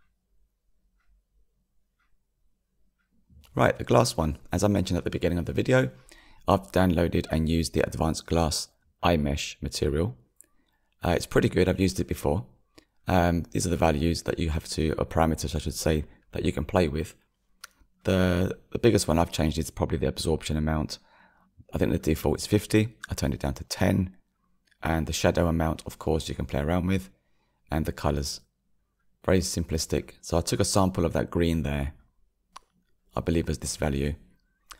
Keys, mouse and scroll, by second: 0.0 ctrl+space, 1.0-1.7 scroll down 1, 1.0-2.9 middle drag, 2.9-4.6 drag, 26.9-28.3 middle drag, 28.3 click, 33.0 click.